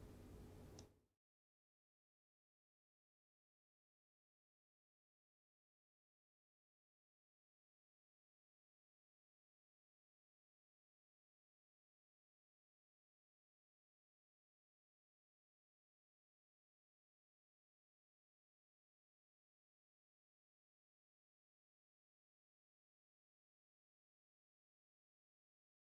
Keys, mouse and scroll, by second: 0.0 click, 1.2-1.8 drag, 2.2 middle click, 2.6 scroll up 1, 3.9 click, 5.4 alt+middle click, 7.2 click, 7.7-10.2 alt+middle drag, 10.2 F3, 10.7 alt+q, 11.1 alt+middle click, 11.9 click, 12.8-13.4 alt+middle drag, 14.2 ctrl+click, 15.0-16.5 alt+middle drag, 17.0 click, 18.4 click, 19.4 right click, 22.0 click, 24.3-25.3 alt+middle drag.